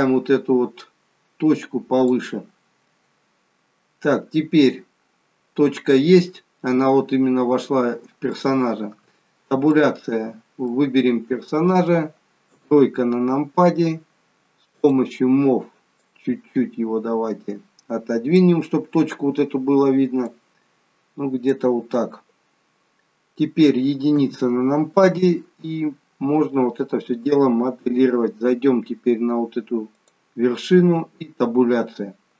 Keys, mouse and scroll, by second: 6.6-7.0 scroll up 1, 9.0 Tab, 9.0-9.7 scroll up 2, 9.7 click, 10.3-10.7 scroll down 2, 10.7 middle click, 12.5 KP_3, 13.5 scroll down 1, 14.8 click, 16.1 click, 20.3 click, 24.2 KP_1, 29.9 click, 31.0 Tab, 31.7-32.3 scroll up 2.